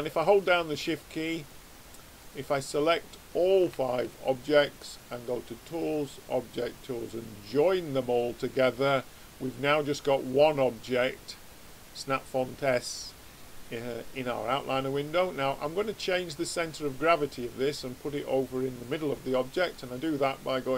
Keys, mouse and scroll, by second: 0.3-7.0 drag, 8.8-12.6 middle drag, 19.7 click.